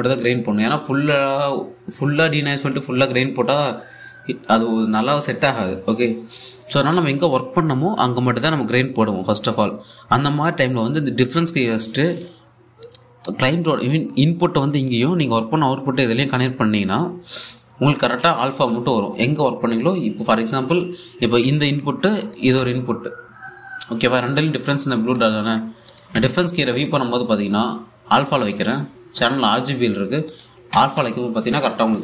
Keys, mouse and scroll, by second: 13.5-16.7 drag, 21.4 click, 22.0 1, 23.0 click, 23.2 1, 25.5 click, 26.8 1, 27.4 click, 30.9 click, 31.3 a.